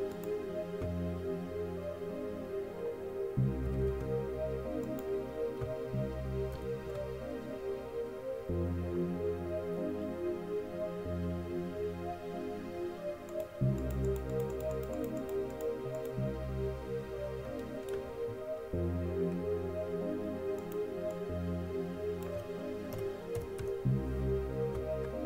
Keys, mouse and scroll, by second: 3.9 ctrl+c, 4.0 ctrl+c, 6.8 ctrl+v, 13.5-18.0 middle drag, 18.6-20.8 middle drag, 20.8-23.1 drag.